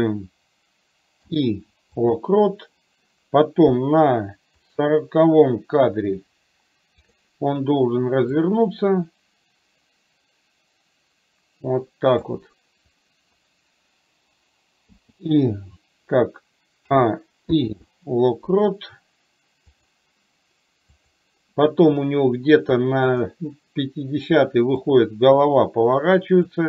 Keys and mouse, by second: 4.7 click, 7.0 click, 8.4-12.4 drag, 17.5 i, 23.2 click, 24.9-26.5 drag.